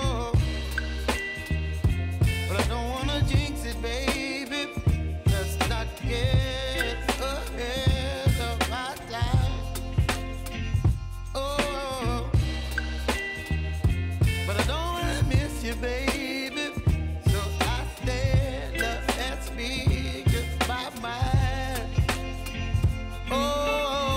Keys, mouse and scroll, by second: 0.9 click, 2.5 k, 3.7 click, 3.9 k, 4.5-8.7 drag, 8.7-10.3 typing, 10.7 click, 11.7 F9, 12.9 click, 14.4 =, 15.2-19.5 drag, 19.5-21.0 drag, 21.0-22.9 drag, 22.9 shift+-, 22.9 shift+Num_Lock.